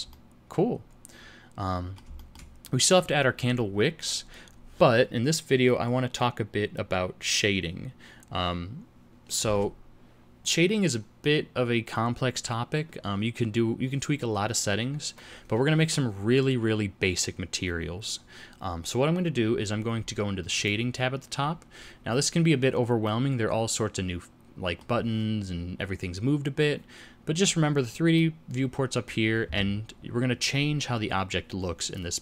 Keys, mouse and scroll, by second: 0.1 middle click, 2.1 shift+middle click.